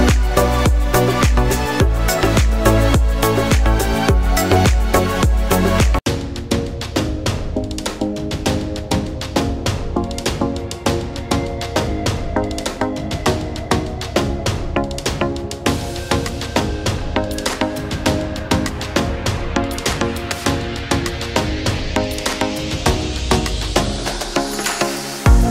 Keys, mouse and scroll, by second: 5.2 scroll down 1, 5.9 click, 8.5 click, 13.0 scroll up 1, 14.4 click, 15.0-15.3 scroll up 1, 17.1 click, 20.1 click.